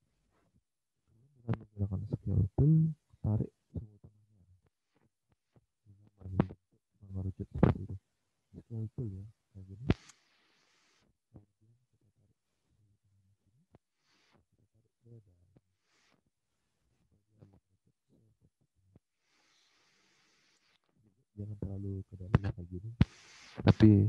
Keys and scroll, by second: 6.4 alt+Tab.